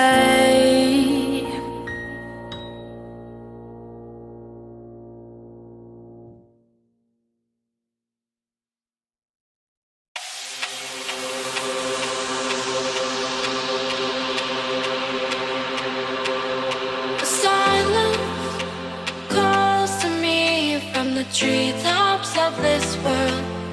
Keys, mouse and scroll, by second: 0.0 scroll down 1, 0.6 right click, 1.7 click, 3.3-5.3 typing, 6.5 click, 8.6 right click, 12.4 right click, 12.9 F10, 13.3 click, 21.4-23.7 typing.